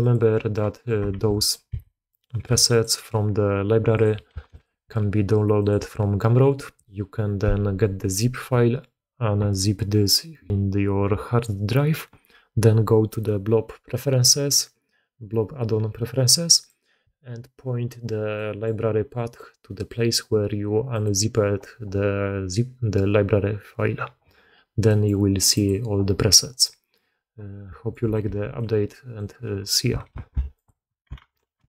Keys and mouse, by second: 0.2 click, 0.6 drag, 1.0 shift+d, 1.6 s, 2.3 g, 4.0 click, 5.5-16.5 drag, 18.3 click, 20.9-24.9 drag, 25.6-26.9 drag, 28.2 alt+a, 28.5-29.1 drag, 29.6 click, 30.1 alt+b, 31.1 alt+a.